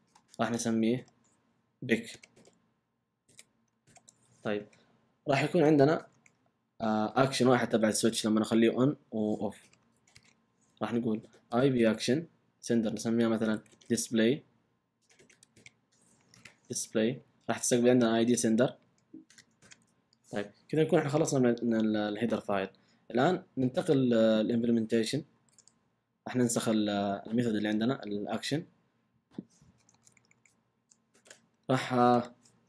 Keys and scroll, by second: 1.0-4.3 typing, 5.2 Down, 6.0 Return, 6.6 Up, 9.4-11.5 typing, 11.8 Return, 13.3-16.3 typing, 17.0 Right, 17.4-18.1 typing, 25.3 super+c, 29.8 Return, 31.1 super+v.